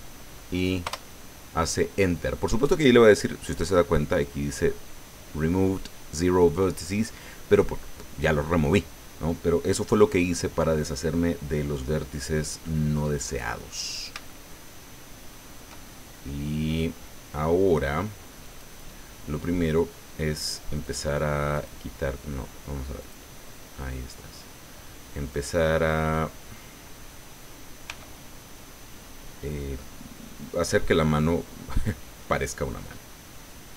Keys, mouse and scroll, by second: 0.8 Return, 12.7 click, 13.7-14.2 scroll up 1, 14.2-15.7 shift+drag, 15.8-16.9 shift+middle drag, 18.4 click, 20.8 click, 21.5 click, 23.0 click, 25.3 right click, 27.8 g.